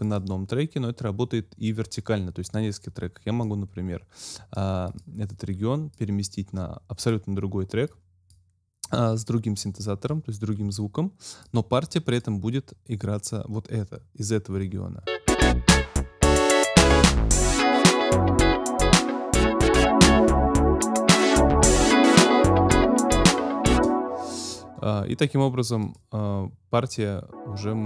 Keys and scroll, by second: 15.0 space, 23.7 space.